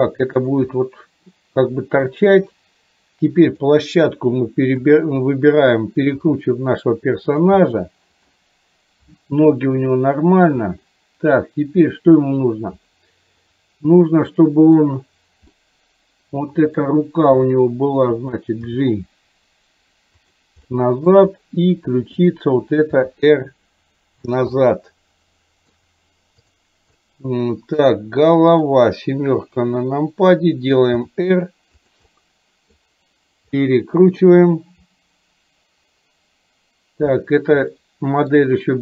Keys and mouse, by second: 0.9-2.1 middle drag, 3.5 click, 4.7 KP_7, 6.4 r, 7.7 middle click, 10.0 middle click, 13.4 click, 14.4 middle click, 15.6-16.8 middle drag, 17.4 r, 18.7 g, 20.7 middle click, 22.2 click, 23.1 r, 24.6-25.9 middle drag, 26.5 click, 27.1 middle click, 28.6 click, 29.6 KP_7, 31.1 r, 32.1 middle click, 33.7 middle click, 37.9 shift+middle click.